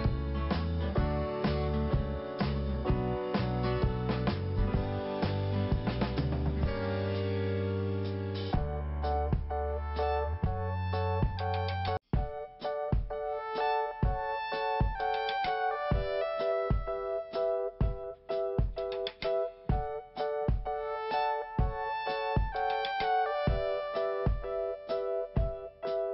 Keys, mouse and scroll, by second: 2.5-3.4 scroll up 5, 5.0 scroll down 1, 5.8 scroll up 1, 7.3 click, 8.3 click, 8.7 click, 9.5 click, 12.9 click, 13.4 scroll down 1, 17.7 click, 18.3 scroll up 2, 21.5 click, 24.6 click, 25.7 click.